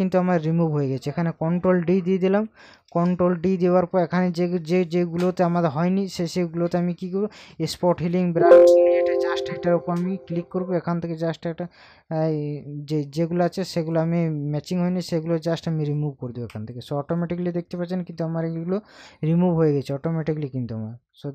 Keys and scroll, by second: 1.9 ctrl+d, 2.8 ctrl+KP_Add.